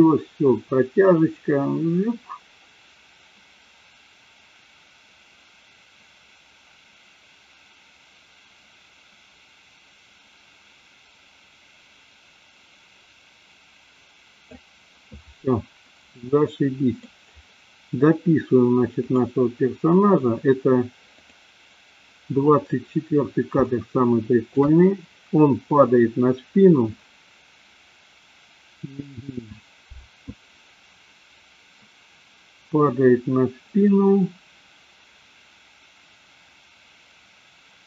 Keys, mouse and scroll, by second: 16.2-17.0 middle drag, 19.3-19.7 drag, 21.4 click, 23.7-24.7 shift+middle drag.